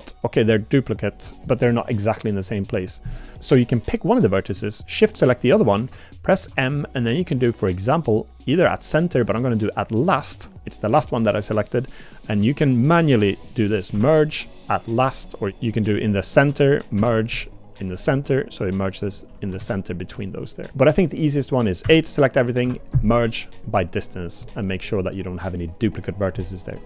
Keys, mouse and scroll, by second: 3.2 click, 5.0 shift+click, 6.4 m, 12.7 shift+click, 13.9 m, 17.0 m, 19.6 ctrl+z, 20.5 click, 21.8 a, 22.6 m.